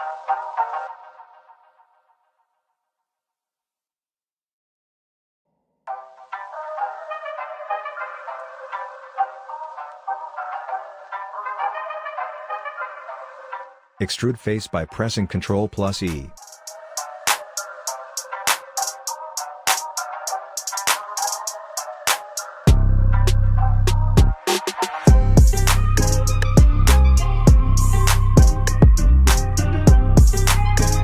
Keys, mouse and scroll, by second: 1.9-3.5 alt+drag, 6.1 scroll down 1, 6.9-11.2 alt+drag, 11.2-12.7 scroll up 1, 13.4 ctrl+e, 14.8-15.9 scroll up 1, 16.0-18.1 alt+drag, 18.1 scroll down 1, 18.6-22.2 alt+drag, 22.2-23.0 scroll up 1, 23.2-24.7 alt+middle drag, 24.7-29.4 drag, 29.4-30.2 scroll down 1.